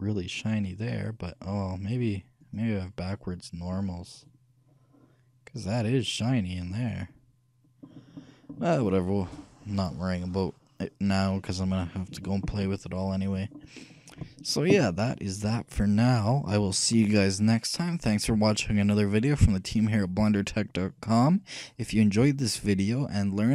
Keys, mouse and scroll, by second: 1.6-2.6 middle drag, 2.6-4.4 right drag, 6.9-9.1 middle drag, 11.6-13.1 middle drag, 13.3 middle click, 13.9-23.5 scroll up 1.